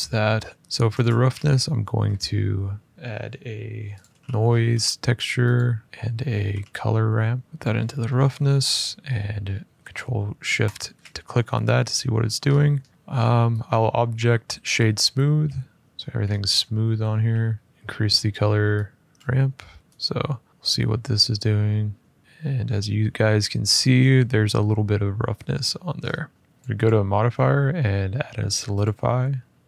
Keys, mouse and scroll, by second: 0.6 click, 0.7 click, 0.9 click, 0.9 a, 3.7 click, 4.1 typing, 5.3 click, 5.8 click, 5.8 click, 5.8-6.7 typing, 7.4 click, 7.8-9.2 scroll, 10.4 click, 11.7-12.9 scroll, 13.4 click, 14.8 click, 15.8-16.6 scroll, 16.9 Tab, 17.3 Tab, 17.7-18.0 scroll, 18.0 click, 18.9 click, 19.7 middle click, 19.7 click, 21.9 click, 22.2 middle click, 22.4 middle click, 25.3 middle click, 25.7-26.4 scroll down 2, 26.4 scroll down 1, 26.5 middle click, 26.5 click, 26.6 click, 28.6 click, 29.2 middle click.